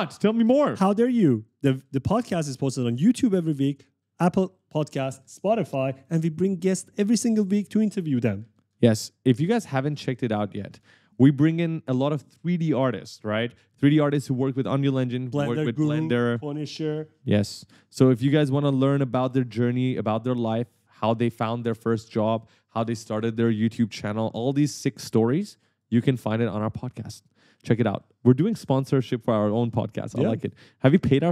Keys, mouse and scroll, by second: 0.5 right click, 0.6 s, 2.7 shift+click, 3.8 right click, 27.9 right click, 28.2 right click, 30.5 right click.